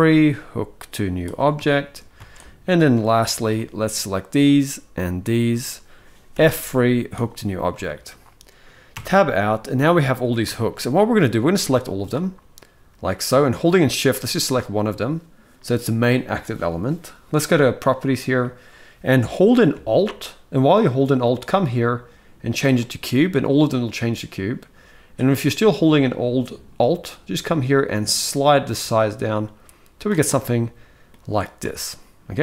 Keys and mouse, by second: 1.4 shift+middle click, 1.9 alt+a, 2.2 click, 3.2 shift+middle click, 4.2 shift+click, 6.1 F3, 7.6 shift+middle click, 8.6 Tab, 9.0-9.9 middle drag, 10.3 shift+middle drag, 10.6 middle click, 11.1-11.7 drag, 13.8 shift+click, 21.1-22.4 alt+drag, 25.7-29.7 alt+drag, 30.0-30.8 middle drag, 31.0-32.0 middle drag.